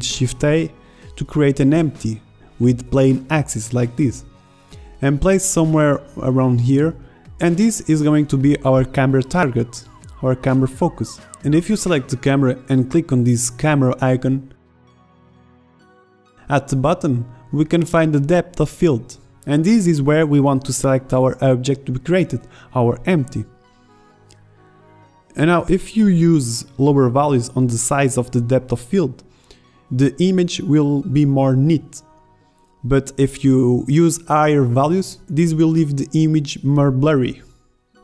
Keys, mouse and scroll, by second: 0.0 shift+a, 3.9-5.2 drag, 6.1 middle drag, 8.5-8.9 middle drag, 13.2-13.8 middle drag, 13.8-15.1 right drag, 24.4 middle click, 25.2 middle click, 29.0 KP_0, 30.5 shift+z.